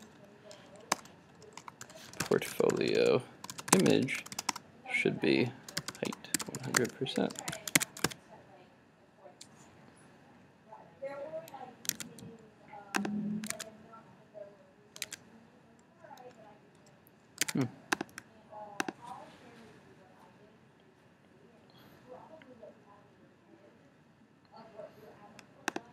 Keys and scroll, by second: 7.6 super+s, 8.0 super+Tab, 8.1 super+r, 12.0 super+Tab.